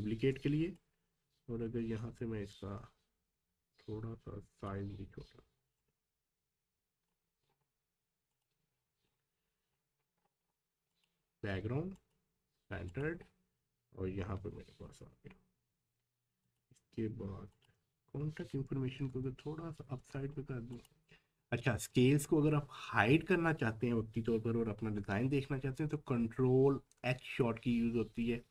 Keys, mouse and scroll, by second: 0.8-4.9 alt+shift+drag, 4.9-5.3 shift+scroll up 2, 5.8-7.5 drag, 7.5 scroll down 1, 8.3 click, 8.7 scroll down 1, 10.9 ctrl+click, 13.2 scroll down 1, 16.4 click, 19.2 shift+Up, 19.8 Up, 20.7 click, 21.1-21.7 scroll down 1, 25.7 ctrl+Num_Lock, 25.7-26.8 scroll down 1, 26.8 ctrl+h.